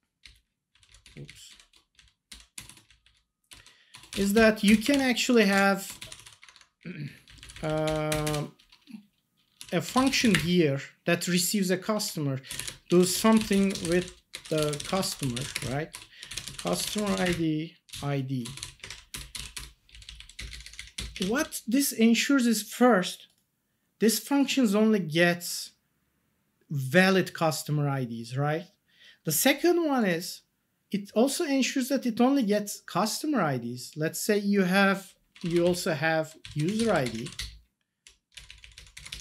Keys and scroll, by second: 0.2 Up, 0.7 Down, 1.0 Up, 1.9 Down, 2.5 BackSpace, 2.8 Down, 3.9 BackSpace, 4.3 Up, 4.6 Return, 4.9 ctrl+s, 5.3-6.7 typing, 6.8 Up, 7.2 Down, 7.8 Up, 8.1 Return, 9.4-10.6 typing, 12.3-18.6 typing, 18.8 Escape, 19.1 Return, 19.5 Return, 19.9 Down, 20.3 Up, 21.3 Down, 35.6 shift+Down, 36.7 ctrl+c, 36.8 Down, 37.0 Up, 37.2 ctrl+v, 37.3 Up.